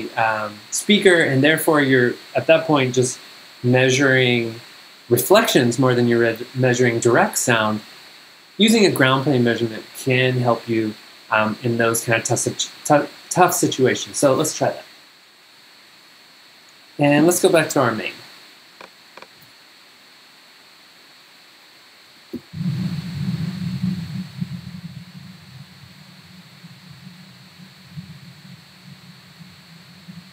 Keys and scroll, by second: 17.4 super+Tab, 19.4 super+Tab, 22.3 g, 23.5 v.